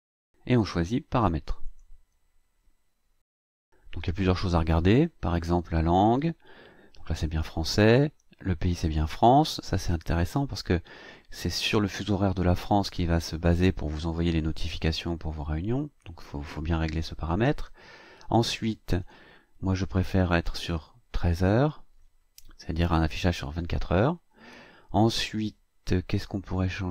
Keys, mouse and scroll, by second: 1.8 click, 19.1 click, 20.2 click, 25.1-26.4 scroll down 1, 26.4-26.8 scroll down 1.